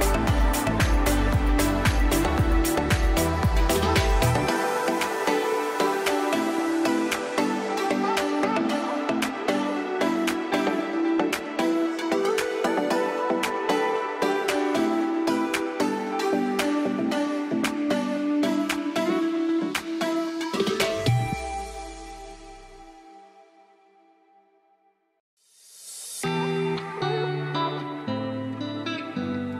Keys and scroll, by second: 0.0 ctrl+z, 1.2 ctrl+g, 2.0 c, 2.0 e, 2.4 Escape, 14.0 F4, 14.3 Escape, 19.8 F2, 23.3 space, 23.4 Escape, 23.9 Delete.